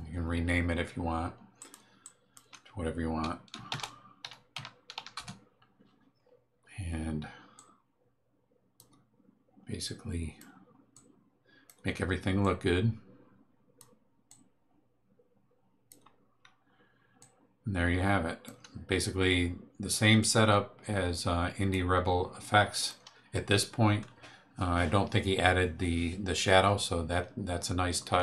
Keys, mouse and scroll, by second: 1.6 click, 2.0 click, 3.7-5.4 typing, 7.5-8.9 drag, 9.8 click, 10.9 click, 12.4-13.9 drag, 14.3-16.1 drag, 17.2-18.6 drag, 20.2-21.9 drag, 22.4 click.